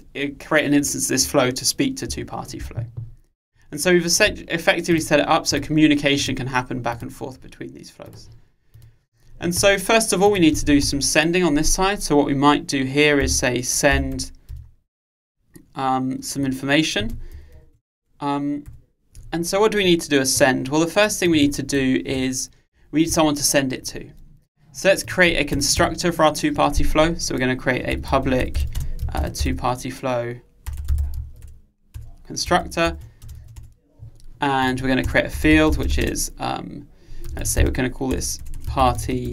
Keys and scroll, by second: 32.1 Return.